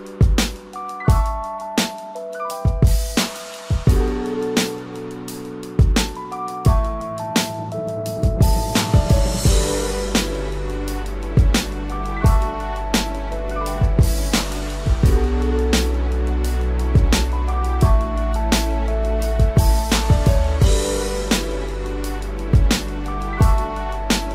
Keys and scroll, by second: 17.0 ctrl+z.